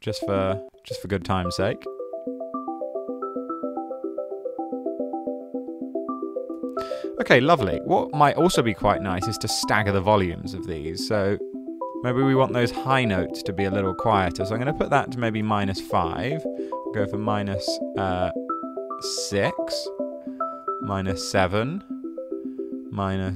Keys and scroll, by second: 0.0-0.9 typing, 0.6 Down, 2.0 typing, 6.9 d, 15.0-15.9 typing, 19.0 typing, 20.6-21.4 typing.